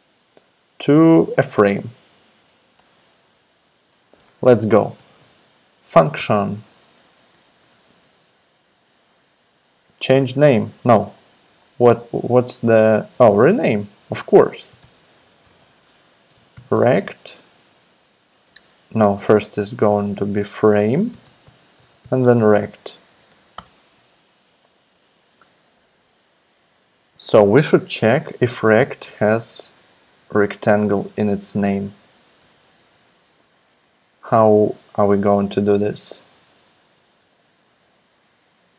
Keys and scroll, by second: 2.7 Return, 2.9 Return, 4.7-7.7 typing, 7.1 Down, 7.3 Tab, 12.9-19.6 typing, 18.5 alt+BackSpace, 18.7 alt+BackSpace, 20.7-23.8 typing, 22.6 super+Right, 28.2-33.2 typing, 30.0 alt+BackSpace.